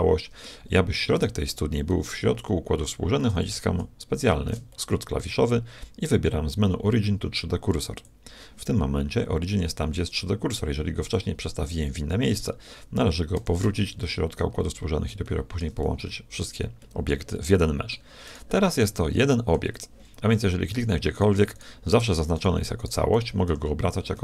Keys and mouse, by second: 0.9 click, 4.1 ctrl+alt+shift+c, 11.0-12.7 drag, 13.3 shift+c, 14.4-19.9 middle drag, 20.7 middle click, 20.9 click, 21.1-24.2 right drag, 23.5 r.